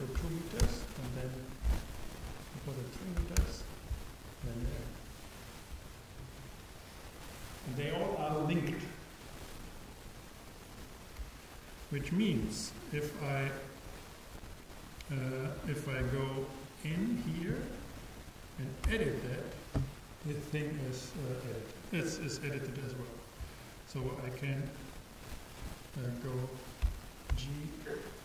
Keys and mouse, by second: 2.4-4.8 drag, 16.6-18.3 super+right drag, 18.9 super+Tab, 26.9 a, 27.3 g.